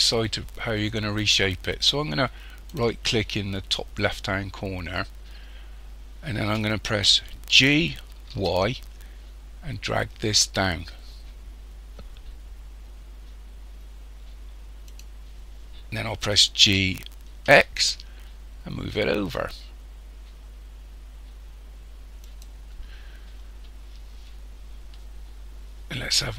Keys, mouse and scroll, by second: 2.7 right click, 7.6 g, 16.7 g, 25.7 scroll up 1.